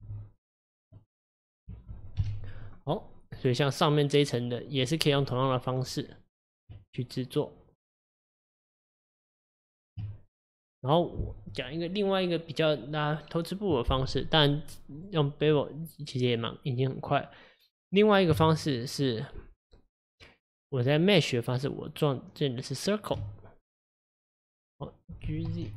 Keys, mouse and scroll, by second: 0.0 g, 1.0-2.2 middle drag, 2.2 KP_1, 3.4 click, 6.1 click, 6.8 Tab, 7.3 Tab, 10.6 click, 15.0 click, 16.3 click, 18.0 click, 18.5 shift+a, 25.3 g.